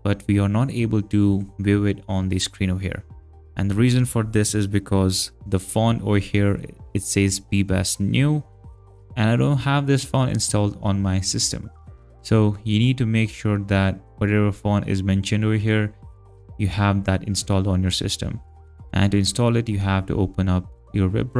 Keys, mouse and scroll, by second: 11.9 alt+click, 18.9 alt+Tab.